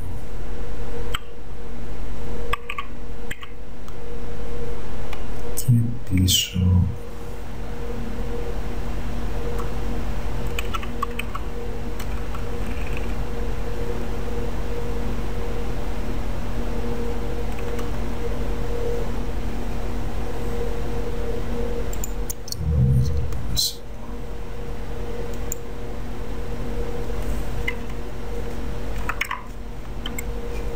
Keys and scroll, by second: 2.7 Down, 6.4 Left, 17.6 Left, 17.8 Left, 30.2 s.